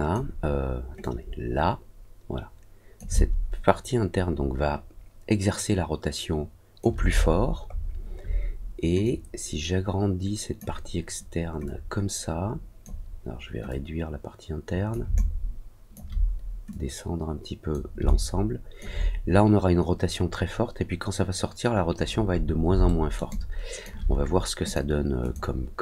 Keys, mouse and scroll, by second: 0.9-2.9 drag, 3.1-6.7 alt+drag, 7.2-7.5 alt+scroll up 1, 7.6 alt+scroll down 1, 9.0-10.5 drag, 11.6-12.8 drag, 13.6-14.8 drag, 15.1 alt+click, 16.6-17.6 drag, 18.0 alt+click, 21.9 middle click, 22.1 scroll down 2, 22.4 scroll up 1, 22.8 alt+middle click, 23.2 alt+click, 24.6 click, 25.1 click.